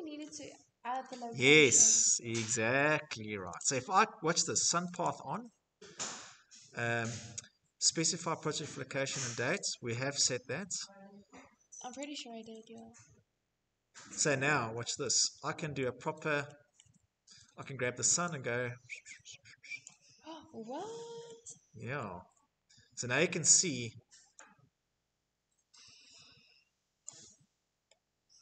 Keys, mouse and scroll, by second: 2.6 click, 4.0 click, 4.7-5.1 scroll, 10.9 click, 12.7-13.3 scroll, 14.8 shift+middle click, 15.7 shift+middle click, 16.0 scroll, 18.1 scroll, 18.8 click, 19.6 scroll, 20.9 shift+scroll, 22.1 scroll, 26.0 click, 27.7 middle click.